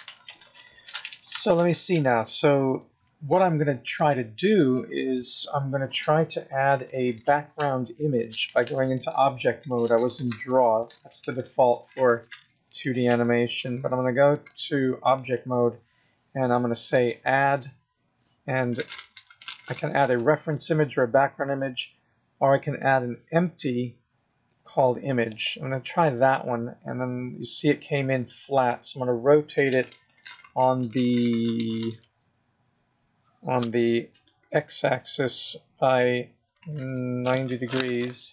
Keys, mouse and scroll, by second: 1.3 scroll down 3, 2.2 middle click, 3.5-3.9 scroll down 2, 3.9 middle click, 6.4 KP_0, 8.9 click, 11.1 click, 14.3 click, 16.9 click, 29.9 r.